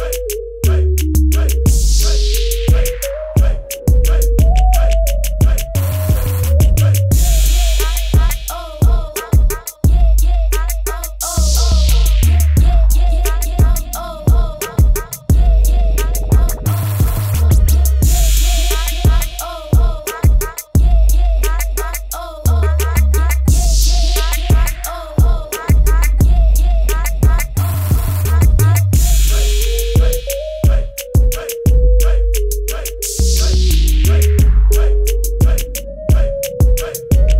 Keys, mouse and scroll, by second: 1.7 b, 2.1 right click, 3.1 click, 8.3 right click, 9.3 scroll down 1, 10.6 click, 11.5 Return, 13.7 alt+click, 15.1 click, 16.7-17.1 typing, 17.3 click, 18.8 ctrl+z, 19.0 click, 21.5 click, 23.2-24.2 typing, 23.9 click, 24.7 click, 26.5 click, 26.8 ctrl+z, 27.3 click, 28.3 click.